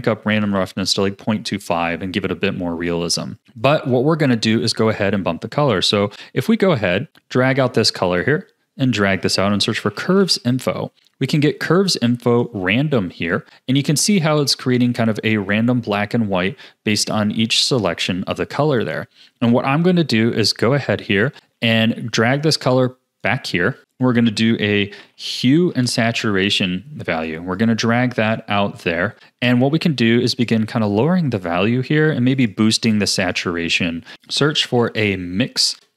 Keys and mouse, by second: 2.9 click, 3.4 click, 3.9 click, 5.1 click, 5.6 click, 7.1 click, 8.2-12.3 drag, 17.0 click, 17.7 click, 18.8 click, 21.6 click, 22.3-23.2 drag, 23.8 shift+a, 27.5 click, 27.6 click, 28.9 click, 30.4 click, 30.8 click, 31.3 click, 32.4 click, 33.3 click, 34.1 g, 34.1 shift+a.